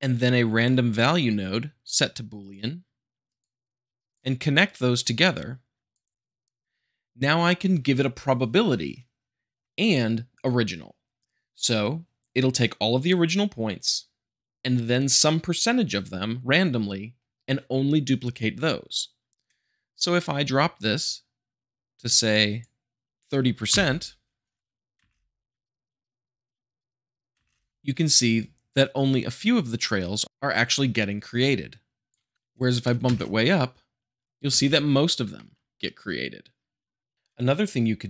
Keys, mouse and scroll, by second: 1.8-2.8 drag, 3.3-4.1 drag, 4.6-5.7 drag, 20.7-21.7 drag, 23.7 shift+Left, 24.9 space, 27.3 space, 27.8-28.4 middle drag, 31.3-32.3 drag, 33.0 space, 34.5 space, 34.9-35.3 scroll up 2, 35.3-36.9 shift+middle drag, 37.1-37.6 scroll up 2.